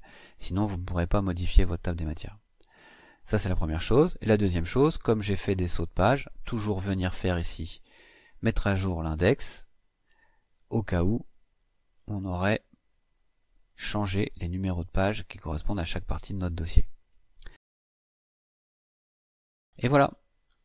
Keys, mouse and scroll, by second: 2.9 click, 4.6 click, 8.8 click, 11.2-12.7 scroll down 5, 13.4-13.8 scroll up 2, 16.5-16.9 scroll up 2, 17.6-19.6 scroll up 9.